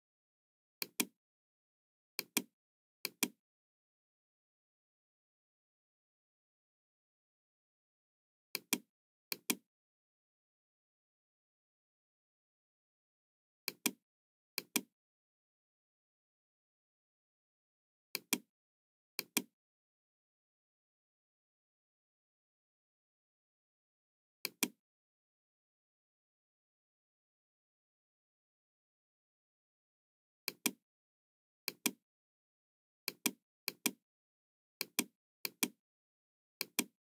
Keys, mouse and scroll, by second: 0.7 Return, 0.7 click, 0.7 KP_3, 0.7 KP_5, 2.1 click, 3.0 click, 8.5 Return, 8.5 click, 8.5 KP_0, 9.2 click, 13.2 Return, 13.2 KP_0, 13.2 KP_3, 13.6 click, 14.5 click, 17.8 Return, 17.8 KP_0, 17.8 KP_4, 18.0 click, 19.1 click, 24.3 click, 27.5 Return, 27.9 KP_0, 27.9 KP_2, 30.4 click, 31.6 click, 33.0 click, 33.5 click, 34.8 click, 35.3 click, 36.6 click.